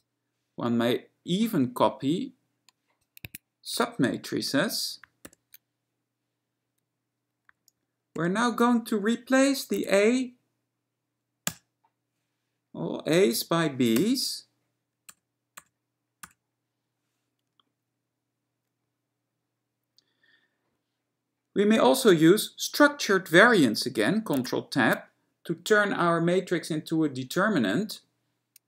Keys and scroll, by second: 3.3 Escape, 3.9 alt+w, 5.4 ctrl+y, 24.5 ctrl+Tab.